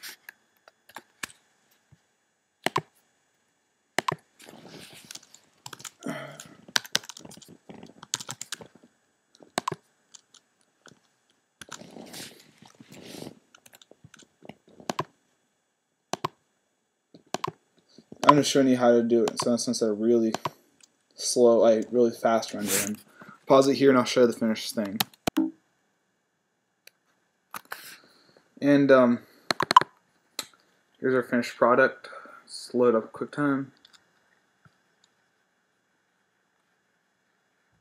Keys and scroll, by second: 0.0-0.5 typing, 5.6-9.0 typing, 11.8-13.5 typing, 25.4 shift+super+..